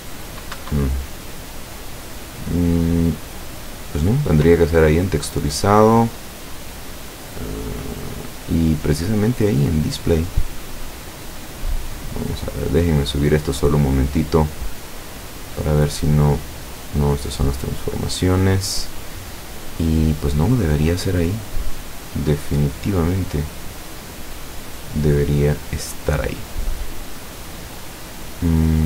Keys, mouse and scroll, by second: 0.7 Escape, 1.7 click, 3.9 click, 5.9-6.2 scroll down 1, 6.6-7.0 scroll down 1, 8.0-8.3 scroll up 2, 10.8-11.7 scroll down 2, 13.2-14.6 drag, 14.7-15.3 scroll up 4, 16.1 click, 16.5 click, 17.2 click, 17.5 click, 18.3-19.0 scroll down 2, 19.3 scroll down 1, 20.8 click, 21.5 click, 22.1 click, 22.7 scroll down 1, 26.1 click, 27.0-27.4 scroll up 1.